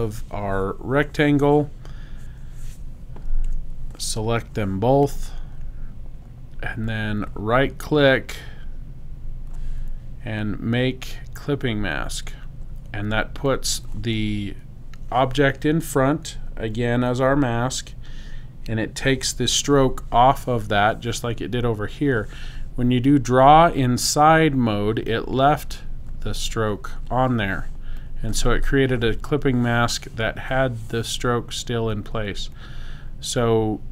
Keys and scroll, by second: 3.5 v.